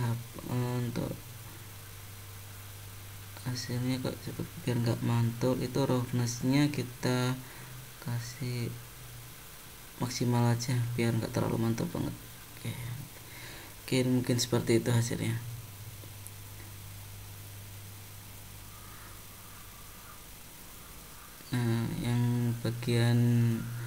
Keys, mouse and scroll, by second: 1.1-1.9 scroll up 6, 3.3-4.2 scroll down 5, 4.5-5.1 scroll down 6, 7.0 click, 10.9 click, 12.4 middle click, 13.4 click, 13.6 middle click, 14.1-14.6 scroll up 5, 15.1 middle click, 18.8 middle click, 19.8-20.2 scroll down 3, 21.3 shift+middle click, 22.0 middle click, 23.4 click.